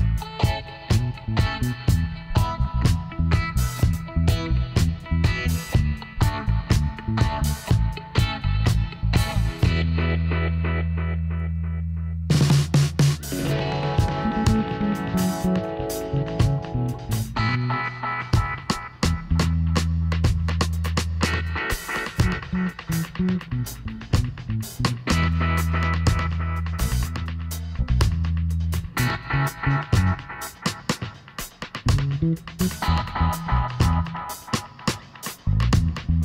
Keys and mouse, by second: 0.4-4.3 middle drag, 4.3 click, 4.5 Tab, 6.2-17.2 middle drag, 17.2 i, 18.7 Tab, 19.8 middle click, 21.3 Tab, 23.4-25.2 drag, 25.4-27.9 drag, 26.8 Tab, 29.5 a, 29.8 a, 30.7-32.6 drag, 31.3 a, 33.9 KP_1, 35.4 Tab.